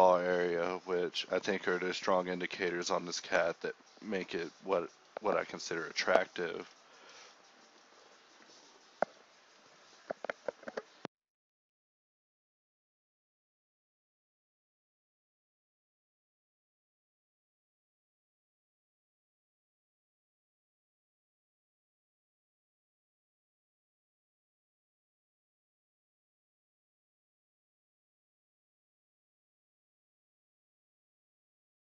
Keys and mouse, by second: 1.4 middle click, 2.6 middle click, 4.2 middle click, 4.6 g, 5.2 g, 5.7 Tab, 6.7 KP_1, 6.9 Tab, 7.3 g, 7.6-10.1 drag, 7.9 g, 8.8 g, 9.8 Tab, 10.1 KP_Divide, 10.6 KP_Divide, 10.7 alt+h, 10.9-19.2 typing, 11.7 Tab, 14.4 ctrl+click, 20.3 a, 20.8 ctrl+z, 21.5-24.4 typing, 23.9 Tab, 24.3 Tab, 26.9 z, 27.1 Tab, 27.4-27.9 middle drag, 27.9 KP_7, 28.6 KP_5, 29.0 Tab, 29.0 KP_5, 29.2-30.4 middle drag, 30.4 KP_7.